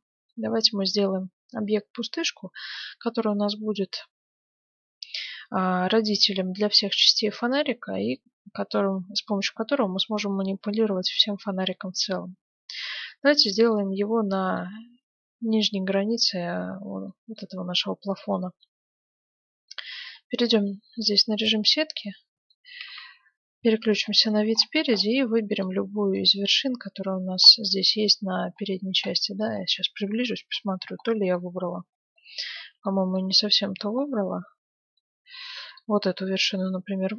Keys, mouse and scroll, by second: 10.6-12.5 middle drag, 13.7-15.6 middle drag, 15.9-16.7 scroll up 1, 16.7-17.0 scroll down 1, 17.0-18.8 middle drag, 19.0 Tab, 19.9 Tab, 20.5-22.1 right drag, 20.8 Tab, 22.1-24.7 middle drag, 22.9 KP_1, 25.5-27.8 right drag, 26.7 middle click, 27.1-30.3 middle drag, 30.3 KP_Decimal, 33.6-35.0 middle drag, 35.0-35.7 scroll up 1, 35.7-37.1 right drag.